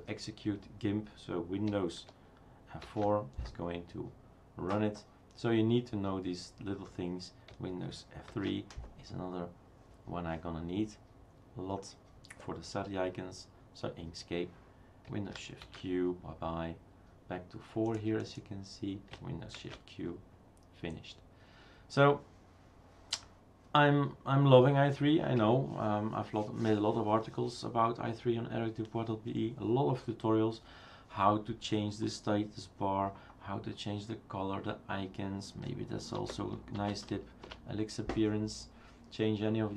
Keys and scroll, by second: 2.9 super+F4, 8.3 super+F3, 15.6 shift+super+q, 19.6 shift+super+q, 36.2 super+d, 36.5-37.4 typing, 37.4 Return.